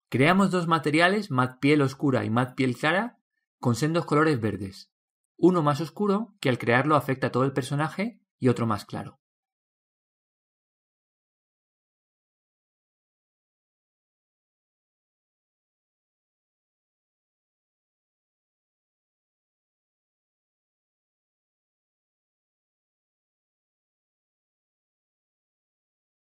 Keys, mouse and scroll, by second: 2.9 BackSpace, 8.5-11.4 drag, 15.9 click, 19.2-24.3 drag.